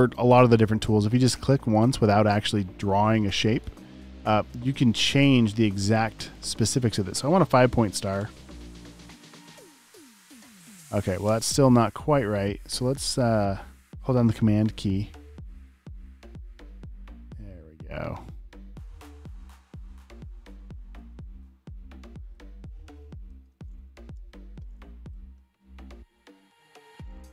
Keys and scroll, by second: 8.1 5, 11.3 BackSpace, 24.1 v, 27.0-27.3 typing.